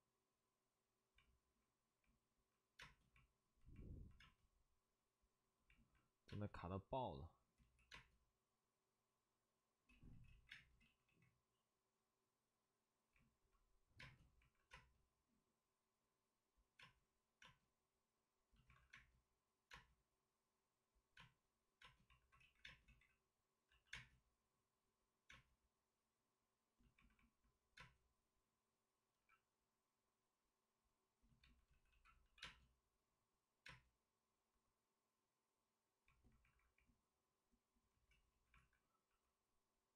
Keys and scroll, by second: 2.7 space, 4.1 space, 6.2 space, 7.5 ctrl+z, 7.9 space, 9.8 ctrl+z, 10.0 ctrl+z, 10.5 space, 10.7 ctrl+z, 13.9 space, 14.4 alt+s, 14.6 space, 16.7 space, 17.4 space, 18.7 alt+s, 18.9 space, 22.1 alt+s, 22.3 ctrl+z, 22.6 space, 22.8 ctrl+z, 23.6 c, 23.8 space, 28.6-29.6 typing, 31.6 ctrl+z, 31.8 ctrl+z, 32.2 c, 32.3 space, 36.4 alt+s, 36.4 space, 38.1 ctrl+z, 38.2 ctrl+z, 38.5 alt+s, 39.0 x.